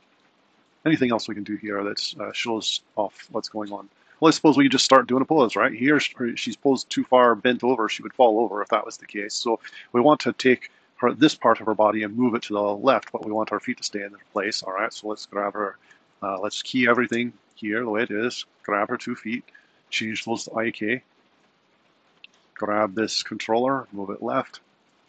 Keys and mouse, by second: 0.0 r, 3.4 super+Down, 11.1 click, 11.9 g, 14.6 click, 16.5 a, 16.9 i, 17.7 click, 22.5 click, 23.1 g, 24.7 super+Down.